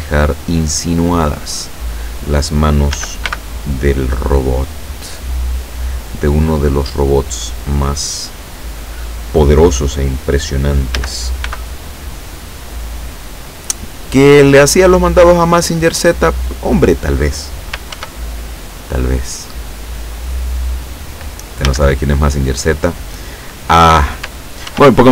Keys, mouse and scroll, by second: 2.9 a, 3.3 b, 3.6-4.6 drag, 5.1-6.3 drag, 11.0 a, 11.5 b, 11.9 click, 13.0-14.2 drag, 18.0 ctrl+r, 19.1 click, 20.4 click, 21.7 a, 24.7 ctrl+r.